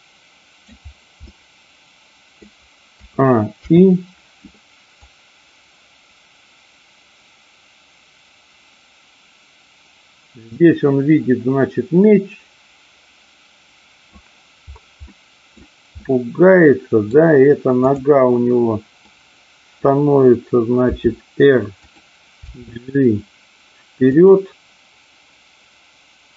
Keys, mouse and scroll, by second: 1.3-2.5 middle drag, 3.6 i, 5.0-14.2 drag, 15.0 middle click, 16.0-17.1 middle drag, 17.9-18.9 drag, 19.1 middle click, 20.9 r, 21.7 click, 22.5 g, 24.1 click.